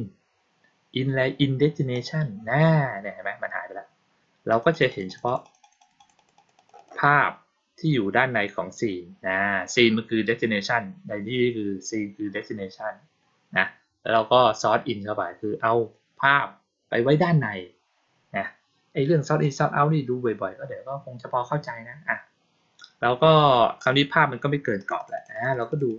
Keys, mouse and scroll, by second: 1.8 click, 4.4 click, 4.6 click, 4.8 click, 5.0 click, 5.2 click, 5.3 click, 5.5 click, 5.7 click, 5.9 click, 6.1 click, 6.3 click, 6.5 click, 6.7 click, 19.3-23.7 drag, 24.7 click, 24.9 click, 25.1 click, 25.2 click, 25.4 click, 25.6 click, 25.8 click.